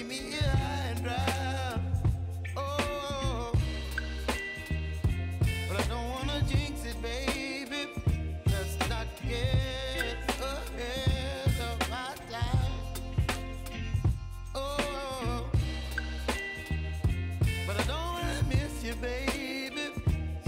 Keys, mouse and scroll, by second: 4.3 space, 5.6 click, 6.7 space, 8.7 space, 9.4 click, 11.7 click, 15.2 Return, 16.2 j, 16.6 space, 17.7 click, 18.4 space.